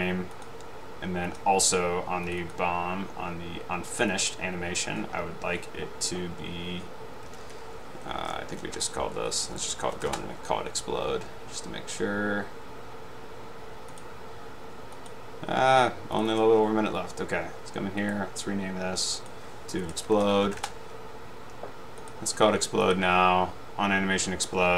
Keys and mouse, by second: 0.5 click, 1.4 click, 2.5-3.1 drag, 4.1 click, 4.2 click, 7.6 Left, 8.8-10.5 typing, 14.1 click, 15.1 drag, 16.2 click, 18.2 right drag, 19.9 e, 20.3 l, 20.7 Return, 23.0 click.